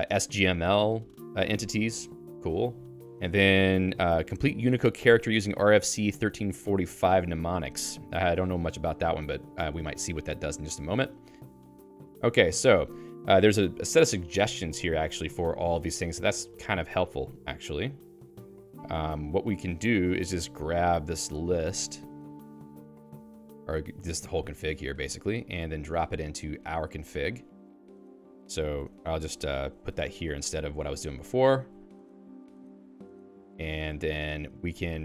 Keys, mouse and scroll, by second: 26.7 e, 28.4 Right, 28.8 Return, 28.9 Return, 30.1 Escape, 30.3 p, 31.7-35.0 typing, 32.6 ctrl+u.